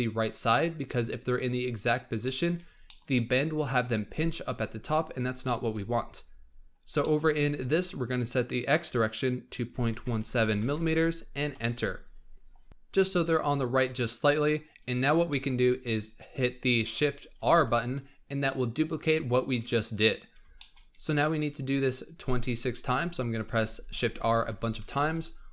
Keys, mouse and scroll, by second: 0.7-1.4 scroll down 4, 1.4-2.2 scroll down 8, 2.2 shift+middle click, 2.6 scroll down 5, 2.8-4.9 shift+middle drag, 4.9-5.4 scroll up 4, 5.4 shift+middle click, 5.8-6.6 scroll up 10, 6.9 shift+middle click, 7.4-8.5 scroll up 3, 8.5-10.6 drag, 10.6 m, 14.4-15.2 scroll down 3, 15.2-17.3 shift+middle drag, 17.3 shift+r, 20.1 scroll down 3, 20.5-23.3 shift+middle drag, 23.3 shift+r, 23.5-24.4 shift+r, 24.6 shift+r, 24.7 shift+r, 25.1-25.5 scroll down 6.